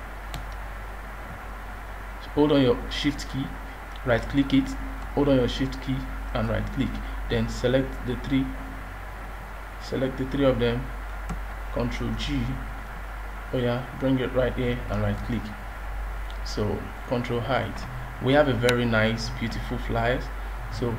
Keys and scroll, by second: 12.0 ctrl+g.